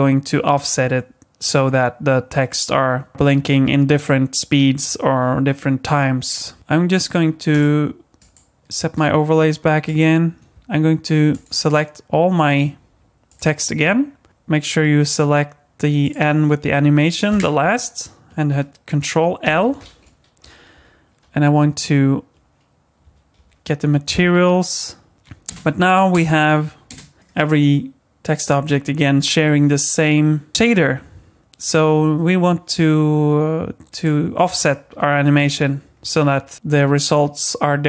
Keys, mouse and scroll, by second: 7.5 click, 8.2 click, 9.8 click, 11.3 shift+click, 13.3 shift+click, 16.0 shift+click, 19.4 ctrl+l, 20.7 Down, 25.5 space, 26.1 space, 26.9 space, 33.9 click, 35.4-35.9 scroll up 4, 35.9-36.5 scroll down 5, 36.5-37.3 scroll up 1.